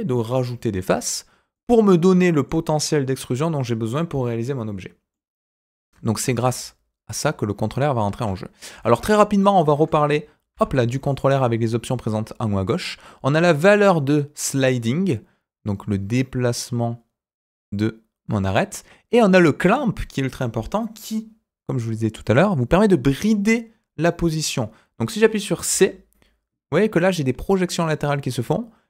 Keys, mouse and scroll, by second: 1.5 middle click, 5.1 middle click, 6.2 ctrl+r, 9.0-9.4 scroll up 2, 9.4 middle click, 10.5 ctrl+r.